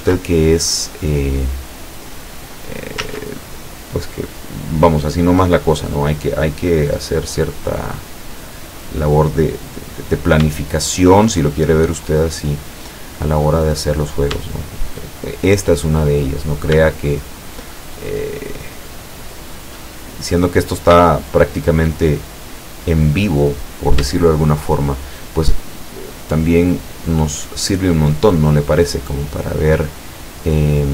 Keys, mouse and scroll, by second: 0.0 ctrl+z, 0.6-1.6 ctrl+middle drag, 2.2 click, 3.1 ctrl+z, 6.3 click, 7.5-7.9 scroll up 2, 8.4 scroll up 2, 10.6 shift+middle click, 12.0-14.1 drag, 14.5-15.2 shift+middle drag, 15.3-16.3 shift+middle drag, 16.5 shift+right click, 16.9 shift+right click, 18.0 shift+right click, 18.4 shift+right click, 18.8 shift+right click, 19.7 shift+right click, 19.9-21.2 shift+middle drag, 21.2 shift+right click, 21.7 shift+right click, 22.1-22.9 shift+middle drag, 23.0-24.2 middle drag, 24.5 shift+right click, 24.9 shift+right click, 25.9-27.3 shift+drag, 27.4 middle click, 28.5 scroll down 2, 29.4-30.9 middle drag.